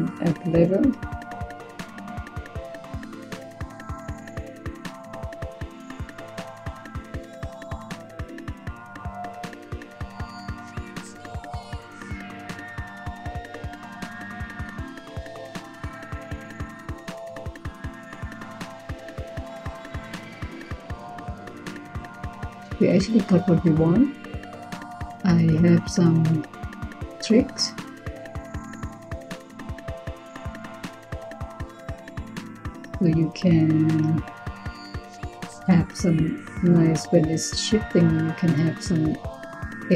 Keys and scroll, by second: 0.1-1.1 typing.